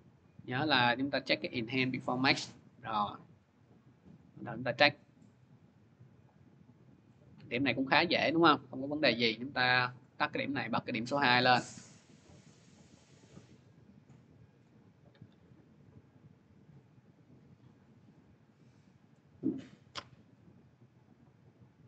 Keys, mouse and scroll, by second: 0.0 middle click, 0.4 click, 1.5 click, 2.2 click, 4.0 click, 7.4 middle click, 8.1 middle click, 9.9 click, 10.4 click, 11.3 middle click, 11.8-12.3 scroll, 12.6-13.1 scroll, 13.4-14.1 scroll, 14.4 click, 16.8 click, 17.0 click, 17.4 click, 18.0 scroll, 18.9 middle click, 19.0 middle click, 20.5 middle click, 21.6 middle click.